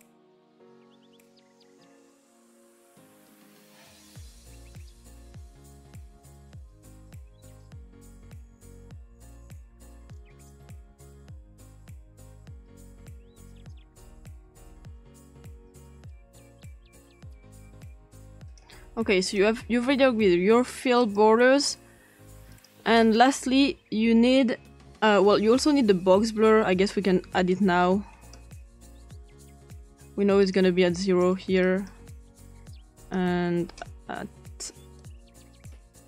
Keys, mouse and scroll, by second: 0.0 click, 0.7 click, 0.9 click, 3.3 click, 3.7-4.9 typing, 4.4 click, 5.1 Return, 8.1 click, 8.7 click, 9.2-9.6 typing, 11.0 click, 11.9 click, 13.8 click, 14.4 click, 14.8 click, 15.1 click, 15.7-16.7 scroll up 4, 16.7-17.3 scroll up 2, 17.3 scroll down 2, 17.6-18.3 scroll up 3, 18.5 click, 19.2 click, 21.0 click, 22.3 click, 25.8-26.4 typing, 27.5 click, 28.8 click, 29.8 click, 30.4 click, 31.0 click, 31.6-31.9 drag, 32.8 click, 35.0 click, 35.7-36.0 scroll down 2.